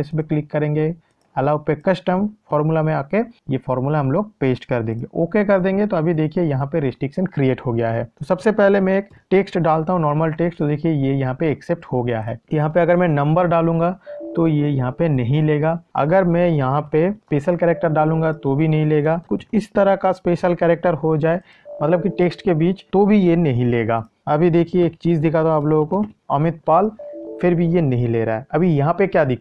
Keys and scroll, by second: 3.3 ctrl+v.